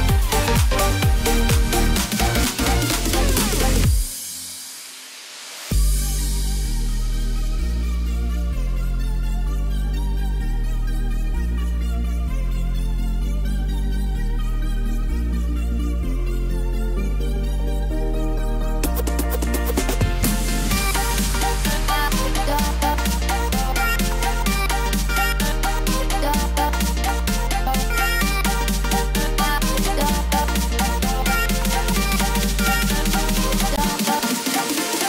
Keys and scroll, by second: 15.0 ctrl+j, 20.2 ctrl+j.